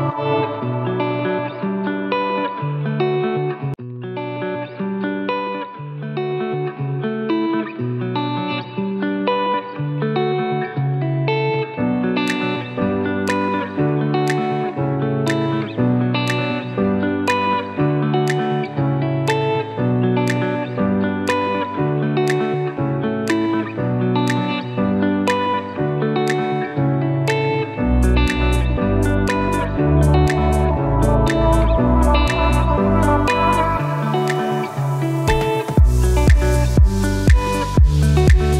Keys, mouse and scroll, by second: 14.7 click, 18.1 click, 20.1-20.9 typing, 23.3-23.8 typing, 24.7 shift+click, 29.5 click, 37.4-38.5 drag.